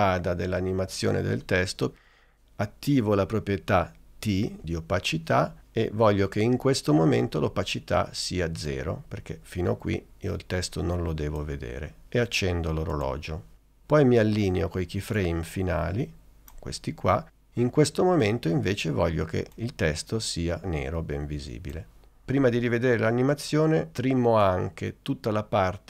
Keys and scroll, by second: 4.9 t.